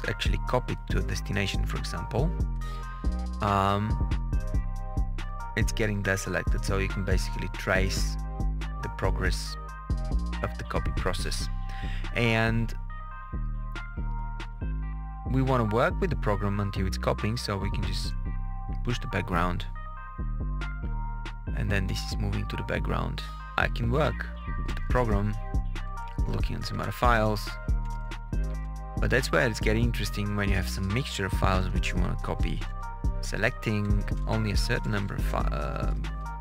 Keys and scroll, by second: 23.5 Return, 24.3 Down, 24.6 Return, 25.6 Page_Down, 26.8 Page_Up, 27.8 Return, 28.4 Up, 29.1 Down, 31.1 Up, 33.6 KP_Add, 34.8 Right, 35.1 BackSpace.